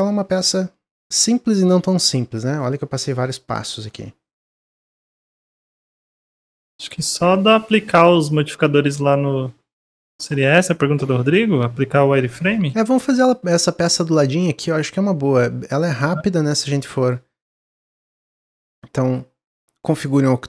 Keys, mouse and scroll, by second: 12.1-13.2 shift+middle drag, 13.2-16.2 drag.